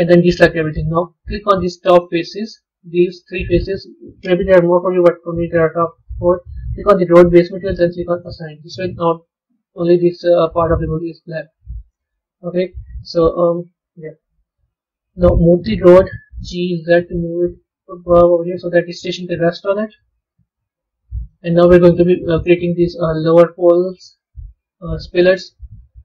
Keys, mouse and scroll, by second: 1.6 click, 2.3 shift+click, 3.2 shift+click, 6.8 click, 8.1 click, 9.4 Tab, 9.7-14.0 middle drag, 14.0 KP_3, 14.5-15.9 scroll up 4, 15.9 g, 18.5-19.9 middle drag, 19.9-20.4 scroll down 2, 20.9-22.4 middle drag.